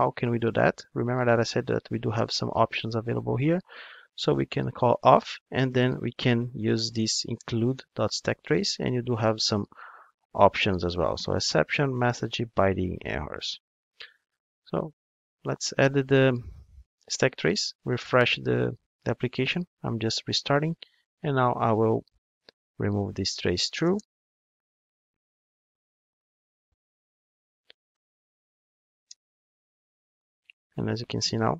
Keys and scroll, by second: 2.3 super+1, 4.9 Return, 9.7 super+b, 14.5 ctrl+d, 16.8 ctrl+d.